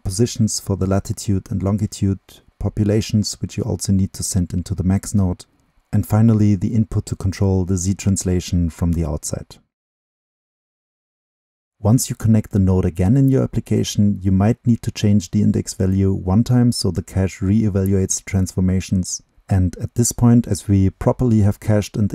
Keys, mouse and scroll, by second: 3.5 click, 4.3-8.3 drag, 8.4-9.0 drag, 9.0-9.5 middle drag, 10.4 middle click, 10.4-17.4 drag, 18.2 click, 18.3 middle drag, 18.3-18.7 drag, 18.7-19.4 scroll up 2, 19.4-19.8 drag, 20.4-22.1 drag.